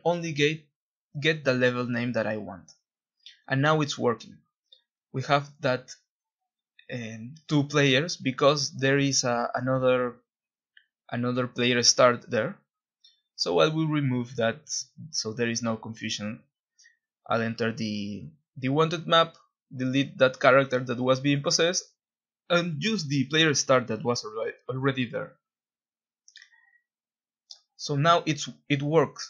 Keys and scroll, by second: 2.9-3.9 w, 4.5 Escape, 9.8-14.8 typing, 15.6 Escape, 16.1-16.9 typing, 20.2 Delete, 22.4-23.4 typing, 24.0 Escape, 27.2-29.2 typing.